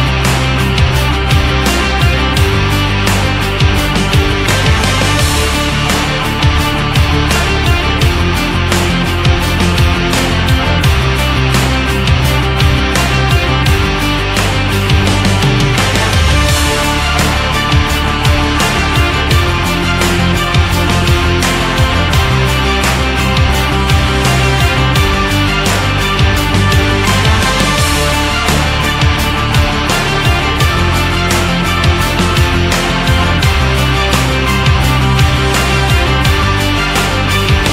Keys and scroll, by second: 1.5 ctrl+shift+Down, 29.0 ctrl+z, 37.2 ctrl+z.